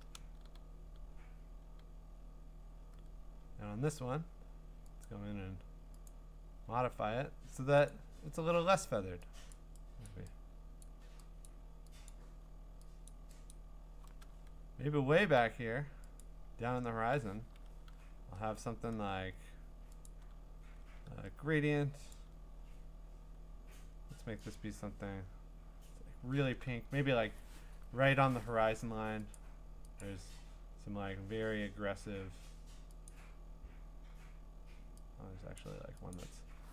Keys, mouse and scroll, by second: 5.0 click, 6.1 click, 8.4-9.5 scroll, 9.5 click, 9.5-10.1 scroll, 10.1 click, 10.8 click, 11.2 middle click, 11.5 click, 12.1 click, 13.1 click, 13.5 click, 16.2 click, 20.1 click, 22.1 click, 24.5 click, 25.2-27.5 scroll, 27.5 scroll down 10, 28.2-29.3 scroll down 2, 29.3 click, 30.0 click, 31.1 scroll down 4, 31.7-32.5 scroll up 3, 33.1 click, 34.3 scroll down 1, 34.4-35.6 scroll, 35.6 click, 36.1 click.